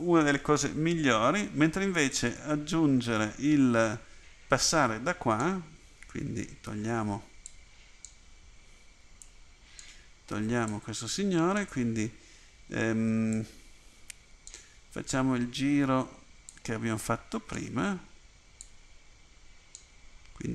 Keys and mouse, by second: 2.2-4.4 right drag, 9.4 click.